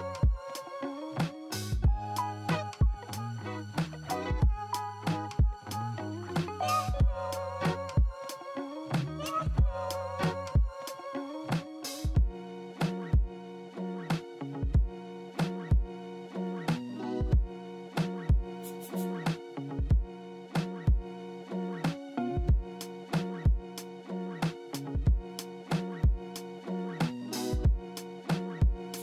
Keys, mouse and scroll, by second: 0.2-1.4 alt+drag, 3.1 alt+middle click, 8.0 scroll up 2, 10.1-10.9 scroll down 3, 28.9 scroll up 3.